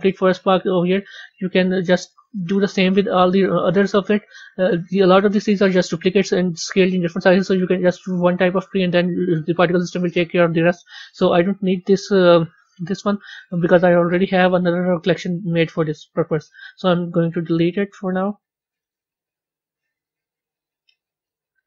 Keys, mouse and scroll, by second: 0.1-1.5 scroll down 2, 1.5 click, 1.9 drag, 2.3-3.1 scroll down 8, 3.1-7.3 middle drag, 12.6 click, 14.2 scroll up 2, 15.3-16.0 scroll down 4, 16.0-18.3 right drag, 18.3 click, 18.7-20.9 right drag, 20.9 click, 21.1-21.6 right drag.